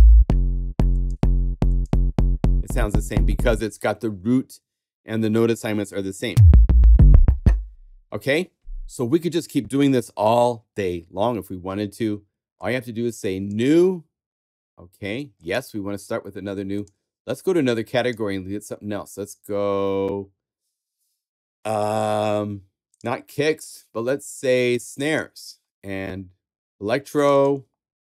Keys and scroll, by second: 9.8 super+Tab.